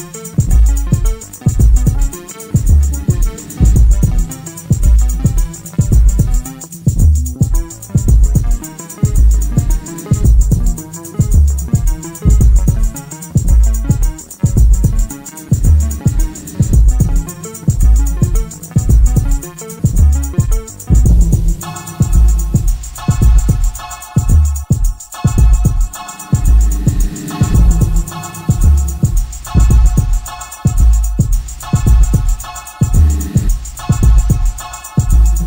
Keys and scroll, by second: 2.2 ,, 4.0 ctrl+z, 8.1 ctrl+z, 8.8 Escape, 24.6 ], 26.4 ], 30.1 ], 30.6 ], 31.7 4.